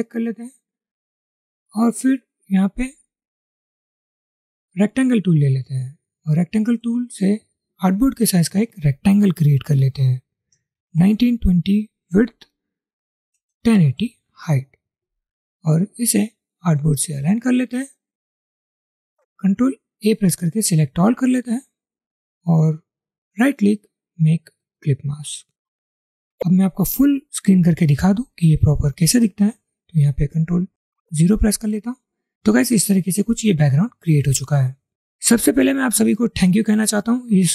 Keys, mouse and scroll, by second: 10.0-11.6 typing, 12.4 Tab, 13.2-14.5 typing, 14.5 Return, 21.2 ctrl+a, 23.4 right click, 30.6 ctrl+0.